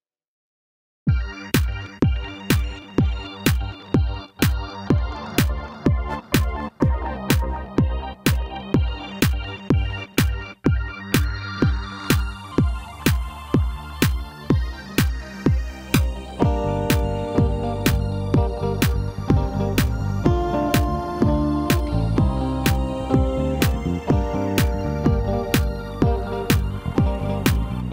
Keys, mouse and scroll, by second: 1.3 scroll up 2, 2.4-2.8 scroll down 1, 3.6 ctrl+r, 16.7 click, 17.5 scroll up 1, 19.1 click, 21.2-23.2 drag, 24.1 scroll up 2, 25.2 ctrl+b.